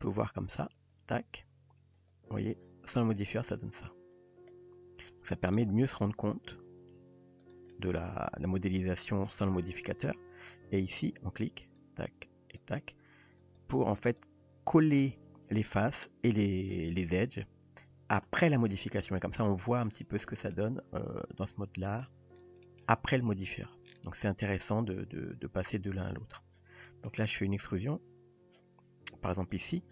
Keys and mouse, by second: 0.8 click, 2.0 click, 3.3-5.1 middle drag, 6.2 s, 7.7 middle drag, 11.7 click, 12.6 click, 13.4 click, 14.0 click, 18.9 click, 19.4 middle drag, 20.5-22.0 middle drag, 22.7 middle click, 25.4 click, 25.9 click, 26.9 middle drag, 29.6 click.